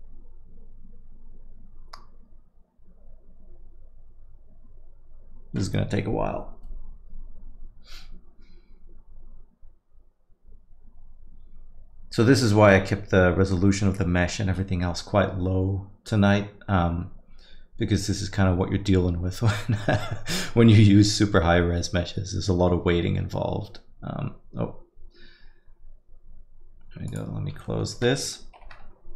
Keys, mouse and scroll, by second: 28.2 right click.